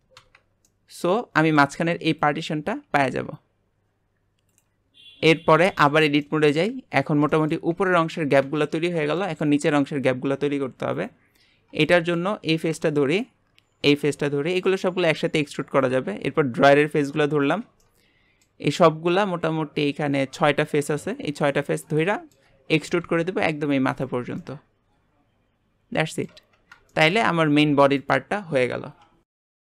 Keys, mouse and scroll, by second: 0.7-1.8 middle drag, 1.8 Tab, 2.2 click, 4.5-5.1 drag, 5.1 Tab, 5.4 scroll down 1, 5.7-8.8 shift+middle drag, 8.8 scroll down 2, 9.2-11.0 shift+middle drag, 11.0 click, 11.5 scroll up 1, 11.8-13.2 shift+middle drag, 13.2-13.9 scroll up 1, 13.9 shift+click, 14.7 shift+click, 15.7 shift+click, 16.6 shift+click, 17.3 shift+click, 17.8 middle click, 18.8 scroll up 1, 21.5-22.9 middle drag, 22.9 e, 24.4-26.3 middle drag, 26.3 Tab, 26.5 scroll down 3, 26.9-27.4 shift+middle drag, 27.4 g.